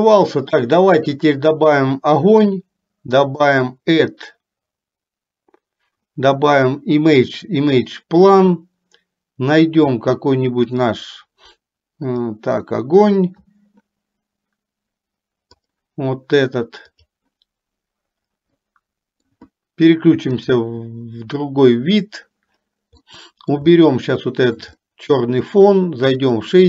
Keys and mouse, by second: 6.0-8.9 drag, 18.8 middle click, 21.5 click, 23.3 middle click, 23.9 shift+middle click, 24.9 middle click.